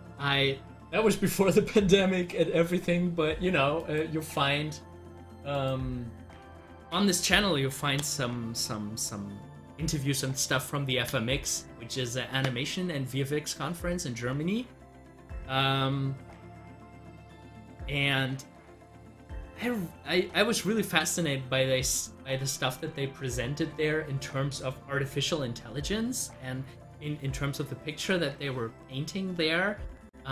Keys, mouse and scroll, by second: 3.8 click.